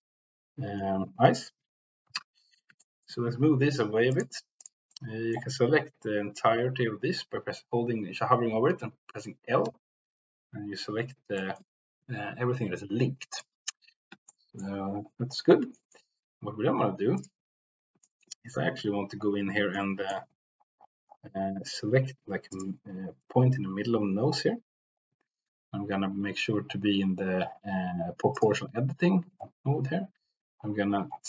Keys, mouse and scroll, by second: 2.3 l, 2.8 shift+middle click, 4.1 click, 4.1 g, 4.5 click, 4.8 middle click, 8.7 l, 10.4 l, 11.3 shift+middle click, 13.3 click, 13.3 g, 14.1 shift+middle click, 15.6 shift+middle click, 17.1 click, 18.0 shift+middle click, 19.7 middle click, 22.5 click, 28.2 click, 29.8 s.